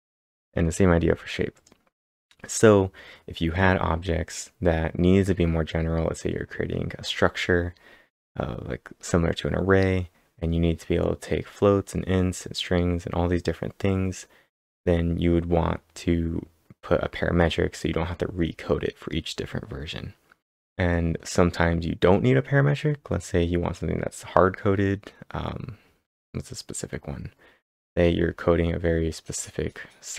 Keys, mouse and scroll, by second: 0.1 scroll down 2, 0.6 scroll up 2, 1.5 click, 20.2-21.0 typing, 20.5 click, 20.5 scroll down 2, 20.6 scroll down 1, 22.4-23.1 typing.